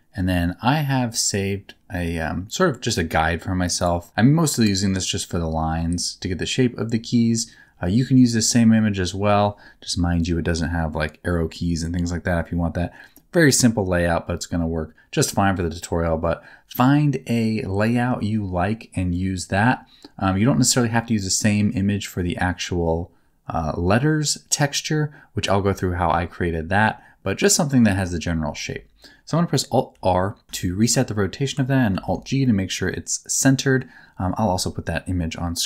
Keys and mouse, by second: 29.9 alt+r, 30.6 shift+middle click, 31.9 alt+g, 32.4-33.8 middle drag.